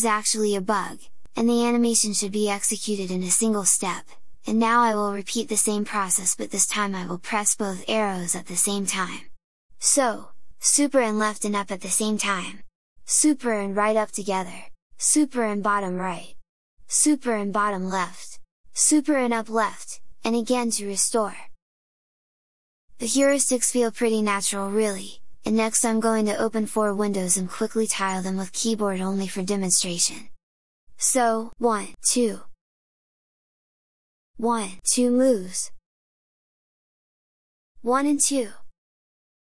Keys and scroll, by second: 11.7 super+Left, 13.2 super+Up, 15.1 super+Down, 16.9 super+Left, 18.9 super+Left, 31.5 super+Left, 31.8 super+Up, 33.1 alt+Tab, 34.3 super+Down, 34.7 super+Left, 35.5 alt+Tab, 36.2 alt+Tab, 37.0 alt+Tab, 37.8 alt+Tab, 38.9 super+Right.